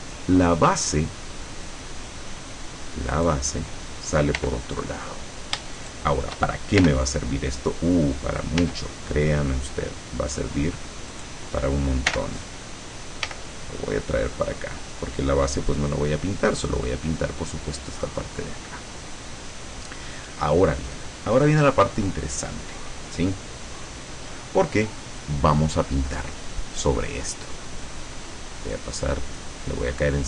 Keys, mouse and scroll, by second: 3.2 right click, 4.5 l, 5.9 shift+right click, 6.9 shift+l, 8.7 g, 10.4 click, 11.2 right click, 12.2 l, 13.4 g, 16.6 click, 17.6-18.1 scroll up 1, 28.8 click.